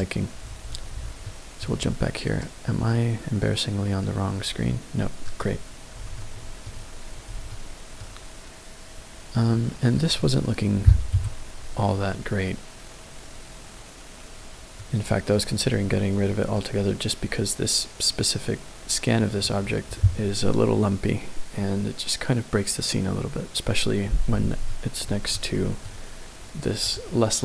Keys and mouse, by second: 0.0 click, 1.1 middle click, 5.2 click, 6.2-6.6 shift+middle drag, 7.5-8.0 shift+middle drag, 9.5-9.9 middle drag, 11.1 KP_Decimal, 12.1-14.0 middle drag, 15.1-15.8 middle drag, 16.9-19.3 middle drag, 24.7-25.1 shift+middle drag, 25.3-25.9 middle drag, 26.8 click.